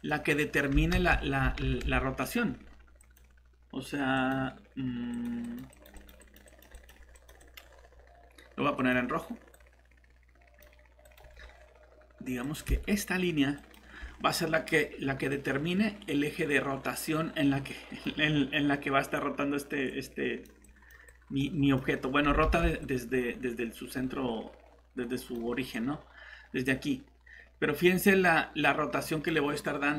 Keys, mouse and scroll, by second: 0.9 ctrl+z, 1.6 ctrl+z, 22.4 ctrl+shift+z.